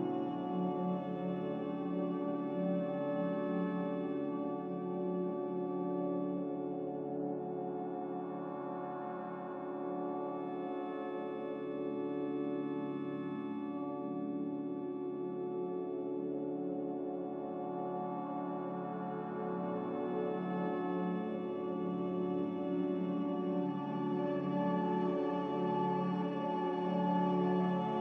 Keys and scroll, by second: 0.1 5, 11.2-12.0 typing, 20.6 a, 25.4 F9, 25.4 z.